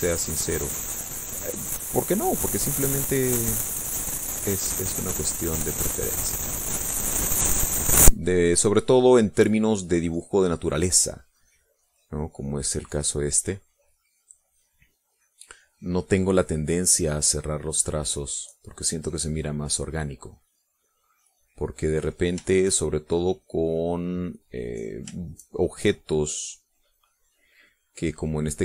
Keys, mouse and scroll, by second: 7.6-12.6 drag, 14.4 click, 14.6-16.9 drag, 19.3-23.6 drag, 23.6 shift+click, 24.1-25.7 shift+drag, 25.8-28.5 drag.